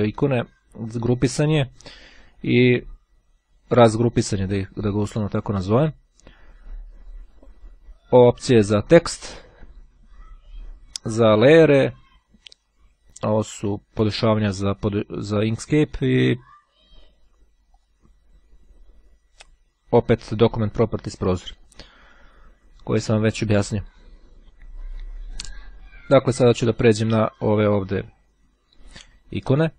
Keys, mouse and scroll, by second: 13.3 click, 15.4-16.5 drag, 17.5 click, 21.1-22.1 drag.